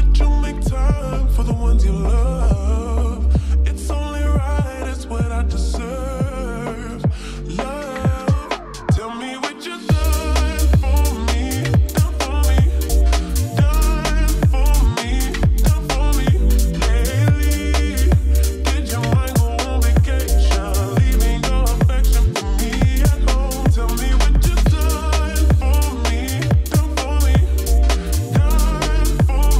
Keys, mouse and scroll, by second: 11.8 space, 14.1 click, 16.5 click, 23.1 click.